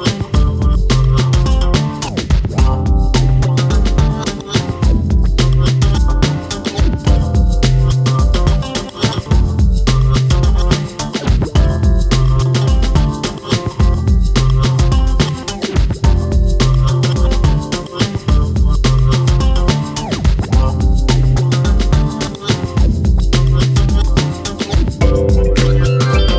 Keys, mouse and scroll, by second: 0.1-1.0 scroll down 4, 1.0-2.5 drag, 3.5 click, 5.9 click, 8.6 click, 10.2-10.9 drag, 11.8 click, 12.0 scroll down 1, 12.2-12.6 shift+middle drag, 12.6 click, 13.4 click, 14.2 click, 14.4-14.9 shift+middle drag, 14.9 click, 16.5-17.2 drag, 19.4 click, 20.0 click, 21.2 click, 21.9 click, 22.4 click, 23.1 click, 24.6 click, 25.6 click.